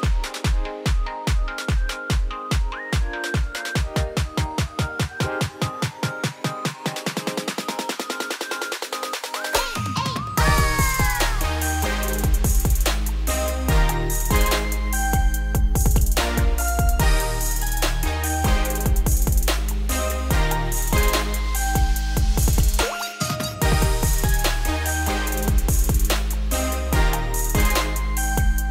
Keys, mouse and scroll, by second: 0.3 ctrl+z, 0.8 ctrl+z, 1.0 ctrl+z, 1.7 ctrl+z, 2.0 ctrl+z, 3.2 click, 4.1 scroll down 1, 4.2 middle click, 4.7-5.5 scroll up 1, 5.5-8.2 drag, 8.6 g, 11.2 click, 12.6 ctrl+a, 13.9 click, 14.4 click, 14.9 x, 15.5 click, 16.7-18.7 right drag, 18.7 click, 19.6 click, 20.0 scroll down 2, 20.2-21.0 middle drag, 21.0 click, 21.3 scroll down 2, 21.4-21.9 middle drag, 21.9-22.4 scroll up 4, 22.4 click, 22.9 Tab, 23.2 middle click, 23.7 scroll up 2, 24.0 2, 24.4 click, 24.6 3, 24.8 click, 25.3 scroll down 1, 25.3 middle click, 26.0 shift+click, 26.4 shift+click, 26.6 shift+middle click, 27.4 shift+click, 27.8 shift+click, 28.1 shift+middle click.